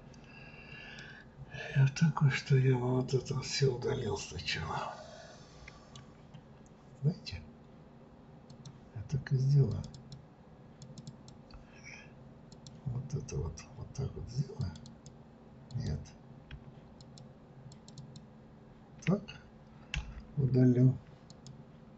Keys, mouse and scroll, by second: 1.0-4.1 middle drag, 8.5 click, 9.7 click, 9.9 click, 10.7 click, 11.1 click, 12.5 click, 14.6 click, 14.8 click, 15.7 click, 17.0 shift+click, 17.7 shift+click, 18.0 shift+click, 19.9 Delete.